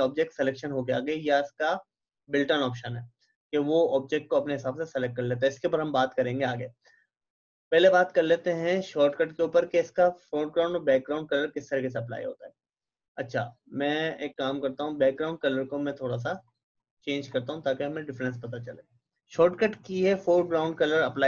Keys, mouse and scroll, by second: 7.7 click, 14.3 click.